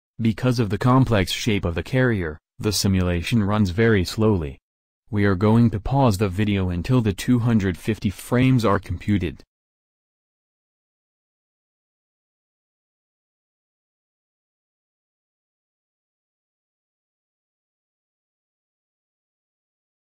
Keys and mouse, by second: 15.5 click, 16.6 click.